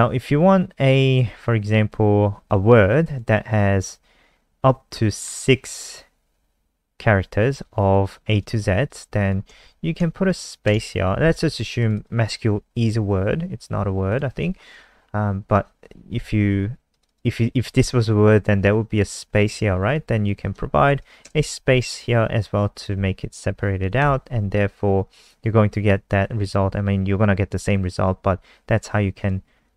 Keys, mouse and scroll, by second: 9.1 click, 9.8 Right, 11.7 click, 11.9 click, 14.0 click, 17.0 click, 18.4 click, 19.5 ctrl+z, 19.8 click, 20.2 click, 20.9 Left, 21.8 click, 22.9 ctrl+s, 24.0 F5, 26.4 click, 27.7 alt+click, 29.1 click.